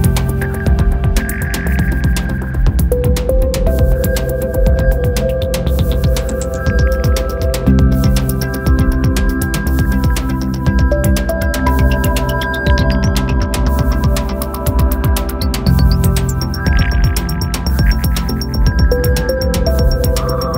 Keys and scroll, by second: 16.6 super+s, 17.3 Right, 17.4 BackSpace, 17.7 5, 17.8 Return.